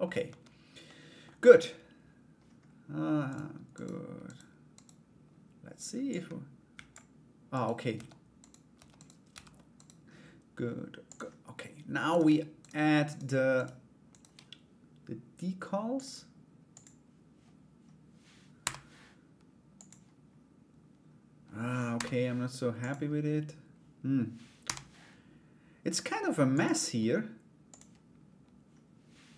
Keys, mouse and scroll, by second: 0.4 middle click, 2.9 right click, 3.3 right click, 3.8 right click, 4.3 right click, 5.7 click, 7.1 right click, 7.5 Tab, 8.0 right click, 8.5 right click, 9.3 right click, 10.6 click, 11.7 right click, 12.2 shift+right click, 12.6 shift+right click, 13.1 shift+right click, 13.7 shift+right click, 15.5 click, 16.3 click, 24.2 u.